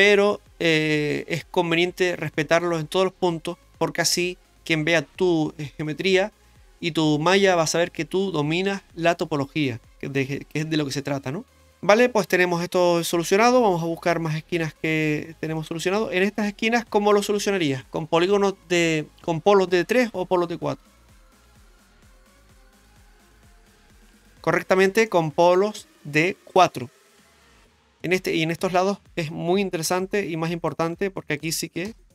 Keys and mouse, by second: 9.2 Tab, 10.2 middle click, 11.5 x, 12.2-14.8 middle drag, 15.6 shift+middle click, 25.1 shift+middle click, 26.6 middle click, 29.8 k.